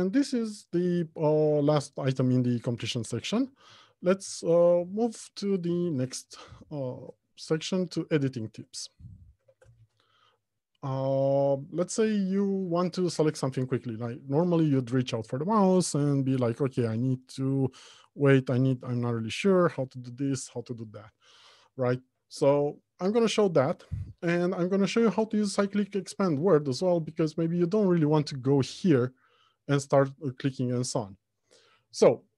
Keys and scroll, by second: 4.4 alt+Home, 4.9 Left, 5.6 Right, 5.9 Return, 6.7 Left.